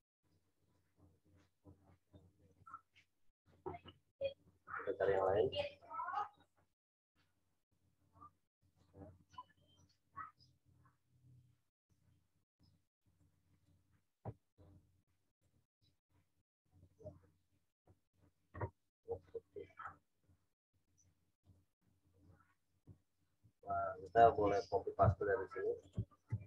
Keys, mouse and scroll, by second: 0.6 click, 3.2 scroll down 1, 5.1 click, 6.4 right click, 8.7 click, 13.1 click, 22.4 click, 25.8 click, 26.2 ctrl+c.